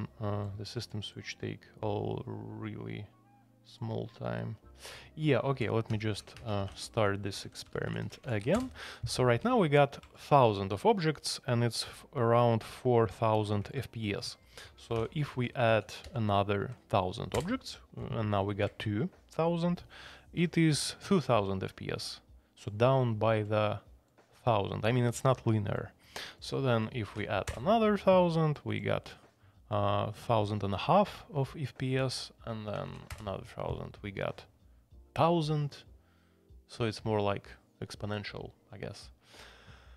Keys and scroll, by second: 5.3-9.0 typing, 14.6 Escape, 14.9 a, 15.3 alt+p, 15.7 alt+p, 16.0 alt+p, 17.3 Return, 27.1 alt+p, 27.5 Return, 32.8 alt+p, 33.1 Return.